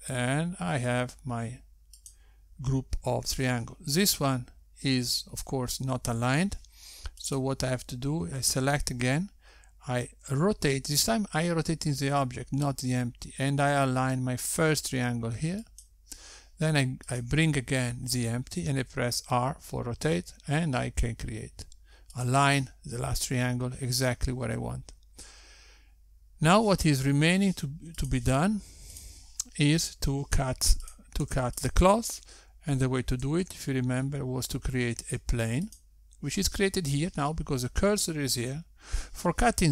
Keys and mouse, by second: 8.8 click, 11.8 r, 18.5 click, 20.1 r, 29.8 click, 30.6 click, 32.6 click, 32.8 x, 34.8 shift+a.